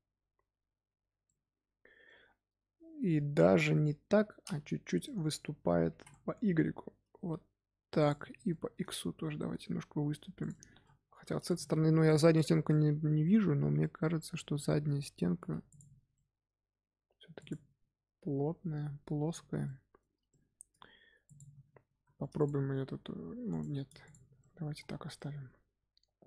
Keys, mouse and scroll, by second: 1.2-4.0 middle drag, 4.0 l, 5.0 middle click, 5.8 s, 8.1 middle click, 8.6 s, 10.4 middle click, 11.1 3, 11.4 click, 12.6-15.2 middle drag, 15.2 g, 15.9 Tab, 16.1-17.3 middle drag, 17.3 click, 18.0-18.7 scroll down 2, 19.6-20.8 shift+middle drag, 20.8-21.2 scroll up 2, 21.2 click, 21.9 3, 22.3 click, 22.7 g, 24.0 click, 24.3-24.7 middle drag, 24.7 scroll up 1, 24.8 scroll down 4, 25.1-26.2 middle drag.